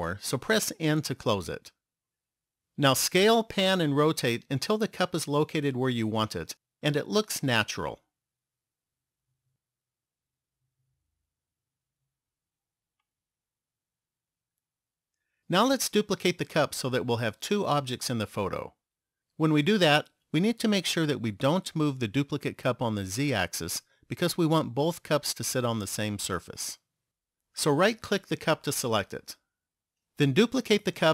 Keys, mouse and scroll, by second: 0.9 n, 3.9-5.8 scroll up 3, 6.4 ctrl+middle click, 10.5 shift+middle click, 13.4 middle click, 28.0 right click.